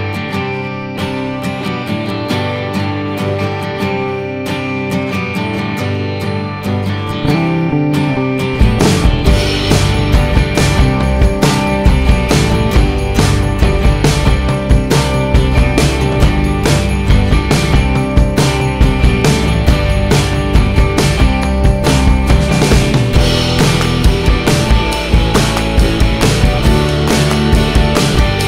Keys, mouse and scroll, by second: 1.9 alt+middle click, 3.6 click, 3.7 click, 4.9 F4, 5.7 click, 6.0 click, 6.7 middle click, 7.3 middle click, 7.8 ctrl+click, 8.8 middle click, 9.8 F3, 10.5 middle click, 11.6 ctrl+click, 12.2 middle click, 12.6 middle click, 14.2 middle click, 14.4 scroll down 1, 15.5 alt+middle click, 18.6 F3, 21.5 ctrl+click, 23.6 click, 24.5 click, 24.8 click, 25.7 click, 25.8 click, 27.2 middle click.